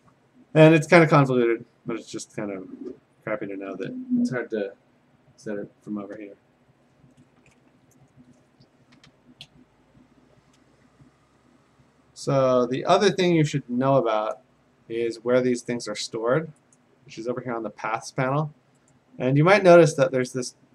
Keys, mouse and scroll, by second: 9.4 Escape, 10.8 a, 16.8-18.8 drag, 20.3 click.